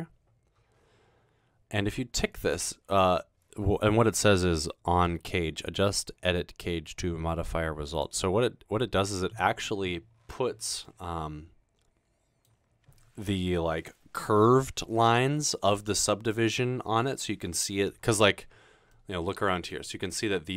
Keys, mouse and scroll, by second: 2.3 click, 2.9 click, 8.0 click.